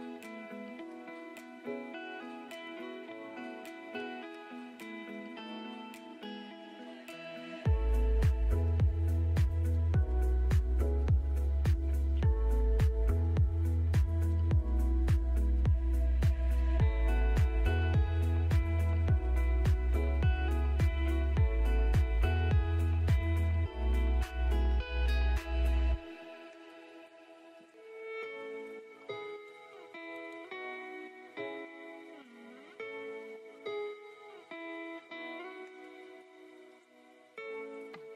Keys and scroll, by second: 0.9 F3, 3.7 Delete, 6.4 c, 6.8 F3, 7.3 F2, 8.0 Escape, 14.9 F3, 15.5 Escape, 19.2 Escape, 20.4 ctrl+z, 21.8 Escape, 22.8 ctrl+z, 26.8 shift+Page_Up, 27.6 Escape, 33.9 F2.